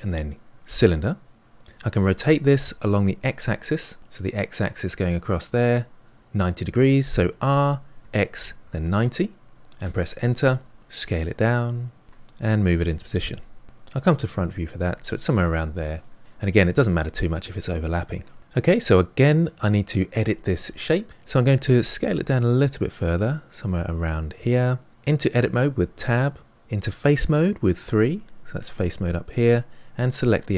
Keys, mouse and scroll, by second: 7.2 r, 10.7 s, 12.0 middle click, 12.6 g, 14.1 KP_1, 18.4-20.8 middle drag, 21.6 s, 25.7 Tab, 27.7 3, 30.2 click.